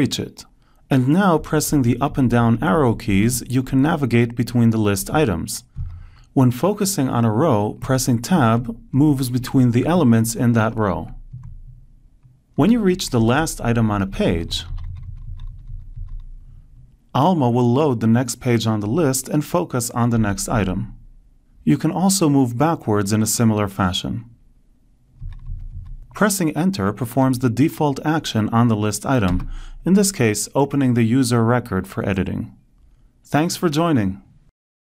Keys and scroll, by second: 0.5 Up, 0.5 Down, 7.3 Tab, 12.1 Down, 27.4 Return.